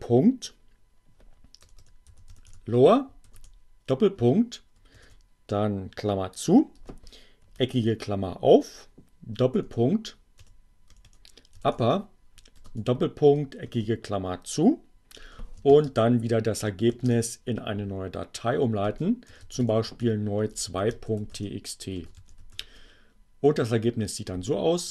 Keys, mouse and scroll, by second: 0.6-3.3 typing, 4.8 alt+9, 8.6 shift+., 10.2-12.1 typing, 13.6 alt+9, 14.1 space, 16.2 shift+<, 18.5-22.8 typing, 24.0 n.